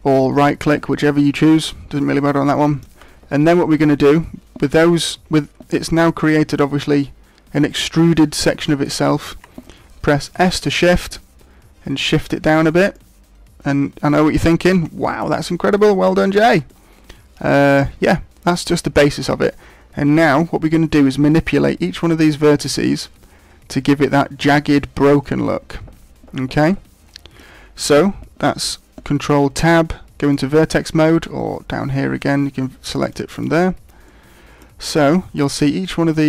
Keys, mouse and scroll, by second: 2.1-2.7 scroll up 2, 2.5 shift+middle click, 5.8 g, 8.9 right click, 10.3 s, 12.5 click, 12.9 middle click, 15.0 shift+middle click, 15.4 middle click, 15.9 scroll down 2, 16.3 shift+middle click, 16.7 middle click, 18.7 scroll up 3, 19.1 shift+middle click, 25.2 middle click, 29.0 ctrl+Tab, 32.1-33.1 click, 32.8 click, 33.0 click, 33.3 click, 34.1 middle click, 35.4 right click.